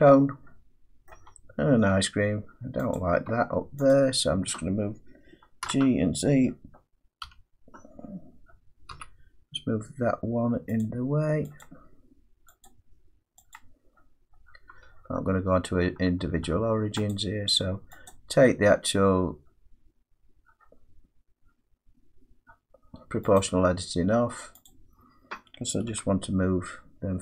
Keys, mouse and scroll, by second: 1.1 middle click, 1.2 Tab, 1.9 Tab, 3.0 click, 3.3 Tab, 3.9 click, 5.7 g, 7.3 g, 8.9 z, 10.9 click, 11.6 click, 12.7 click, 13.6 click, 14.0-15.1 scroll, 17.1 click, 18.1 click, 23.4 click, 24.7 click, 25.9 g.